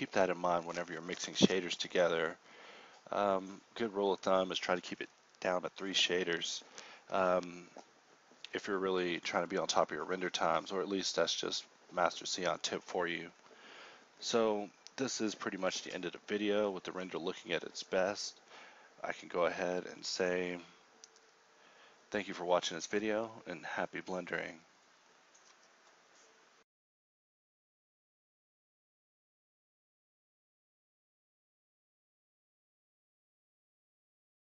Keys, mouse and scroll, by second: 33.9 z.